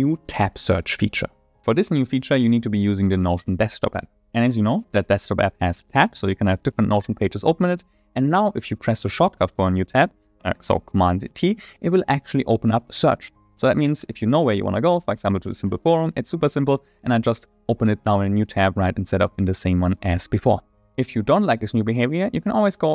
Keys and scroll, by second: 13.8 super+t.